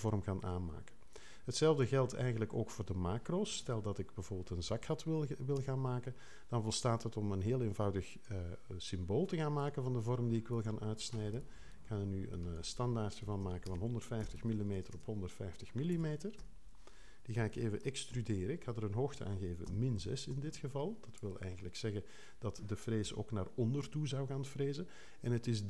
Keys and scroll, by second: 5.5 0, 12.9-15.9 typing, 16.3 Home, 18.0 super+e, 19.6 -, 20.0 6, 20.3 Return, 23.0 3.